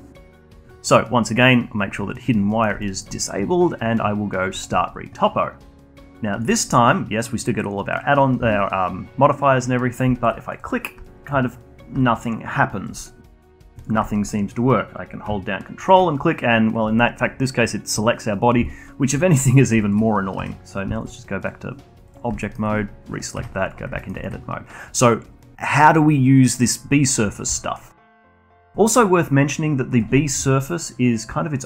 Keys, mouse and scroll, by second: 2.4 middle click, 2.8-4.5 alt+middle drag, 4.5-7.5 drag, 7.5-7.8 scroll down 3, 7.8-9.7 scroll up 1, 9.7-10.1 scroll up 8, 10.1 alt+click, 11.0-13.1 alt+drag, 14.0-15.9 alt+drag, 18.4 scroll down 1, 18.6-20.3 alt+drag, 20.3 Tab, 20.9-21.4 alt+drag, 22.0 click, 22.4 alt+middle click, 23.3 Tab, 23.9 alt+middle click, 24.1-27.1 alt+drag, 27.5-27.9 alt+middle drag, 27.9-31.6 alt+drag.